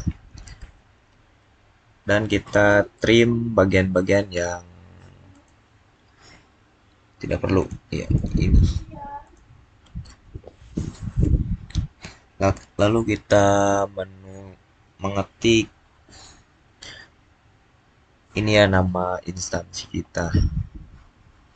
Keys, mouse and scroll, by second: 1.7 scroll down 1, 2.3 middle click, 5.2 middle click, 5.9-7.5 scroll up 1, 7.5 click.